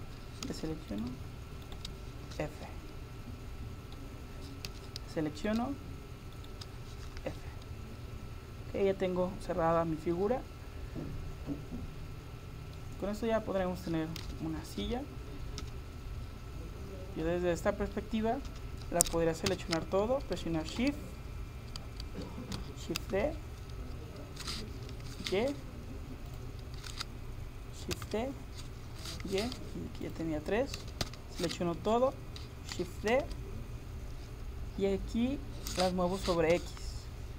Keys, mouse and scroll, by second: 0.5 a, 0.9 right click, 2.3 f, 2.7 middle click, 3.3 middle click, 4.7 a, 5.4 middle click, 5.6-7.1 right drag, 7.1 f, 7.4 middle click, 7.6 middle click, 8.0 middle click, 8.6 middle click, 8.8 middle click, 9.0 middle click, 13.2-15.6 scroll up 1, 14.3 a, 15.6 KP_7, 18.5 KP_7, 19.5 a, 23.0 shift+d, 27.9 shift+d, 30.8 a, 31.1 a, 33.1 shift+d.